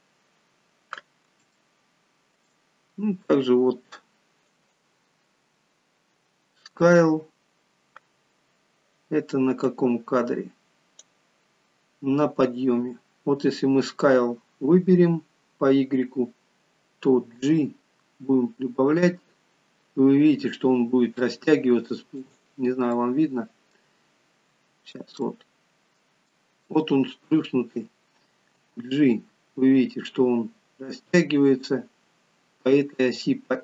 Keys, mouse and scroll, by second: 1.5 shift+middle click, 2.9-3.6 scroll up 1, 4.5 click, 4.5-6.0 scroll up 3, 9.6 click, 17.4 g, 22.9 middle click, 24.0-25.2 scroll up 5, 25.2 shift+middle click, 25.2-26.0 scroll up 2, 26.3 shift+middle click, 28.6 g.